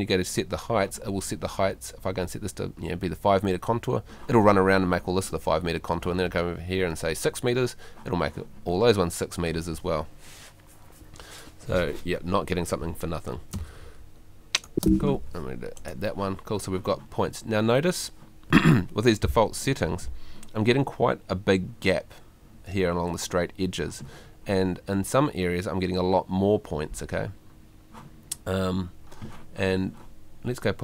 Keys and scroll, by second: 13.5 space.